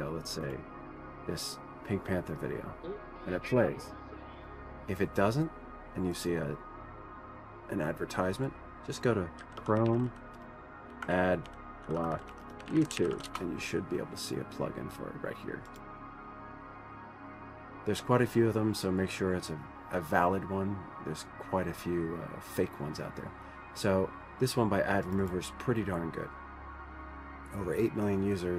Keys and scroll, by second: 9.6-14.0 typing.